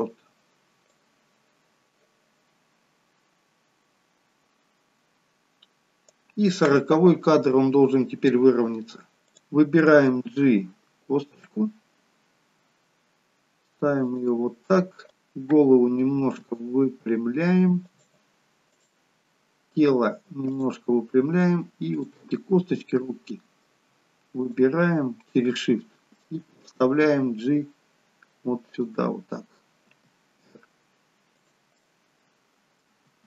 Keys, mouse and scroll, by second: 1.0 click, 9.3 click, 10.3 g, 15.1 click, 16.1 r, 18.6 click, 19.7 r, 22.4 click, 22.9 middle click, 24.5 shift+click, 25.3 middle click, 27.1 g, 29.9 r, 31.7 middle click, 33.0 r.